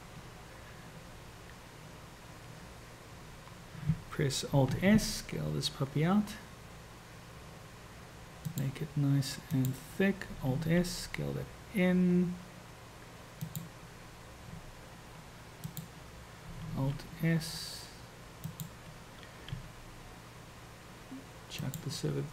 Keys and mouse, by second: 4.7 alt+s, 9.6 click, 10.6 alt+s, 15.8 click, 16.7 alt+s, 19.5 g.